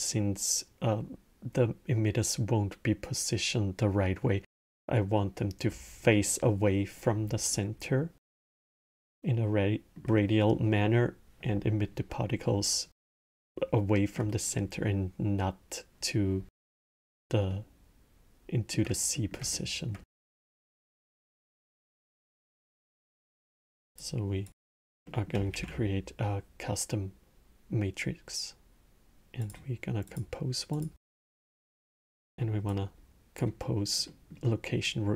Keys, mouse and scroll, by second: 8.4-11.6 alt+middle drag, 13.1-16.2 alt+middle drag, 17.3-21.3 alt+middle drag, 21.3 click, 23.0-24.3 drag, 24.8-25.3 middle drag, 25.3 shift+a, 30.6-31.4 drag, 31.8-32.5 middle drag, 32.5 click, 33.9 middle click, 34.6 click.